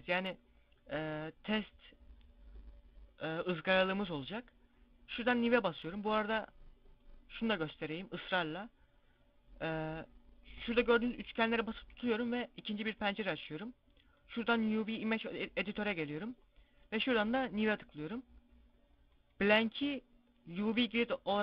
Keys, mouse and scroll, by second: 6.9 click, 10.8 click.